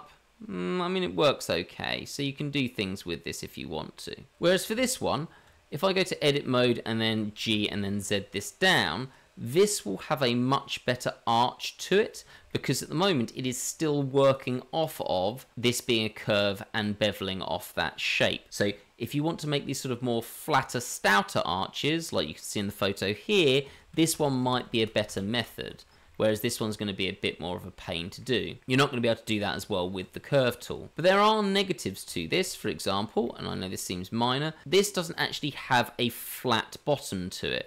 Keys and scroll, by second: 5.1 ctrl+z, 5.2 ctrl+z, 5.4 Tab, 5.8 Tab, 7.4 g, 13.4 Tab, 25.0 ctrl+z, 29.4 Tab.